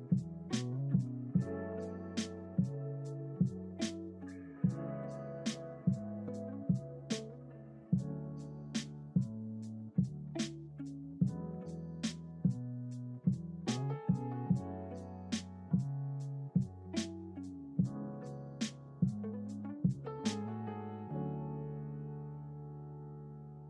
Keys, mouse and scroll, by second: 15.0 click, 17.1-19.3 scroll up 5, 19.3 click, 20.7-21.6 scroll down 2, 21.6-23.6 drag.